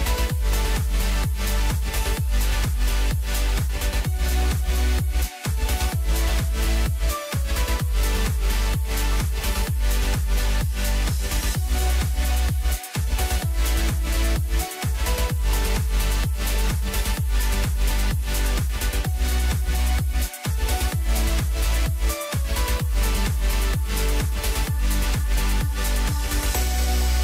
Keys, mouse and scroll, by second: 0.1-0.7 scroll down 1, 0.7-1.4 scroll up 1, 1.4 g, 3.3-4.9 middle drag, 4.9 KP_1, 6.2 drag, 7.7 click, 8.4-11.9 right drag, 11.9 ctrl+z, 13.2-14.6 right drag, 14.6-15.6 middle drag, 15.6 KP_1, 16.5 ctrl+a, 20.9 click, 21.4-22.4 scroll down 2, 22.4-24.9 middle drag, 24.9 scroll up 1, 25.1 middle click, 25.5-25.9 scroll up 1, 25.9-26.9 middle drag, 26.9 g.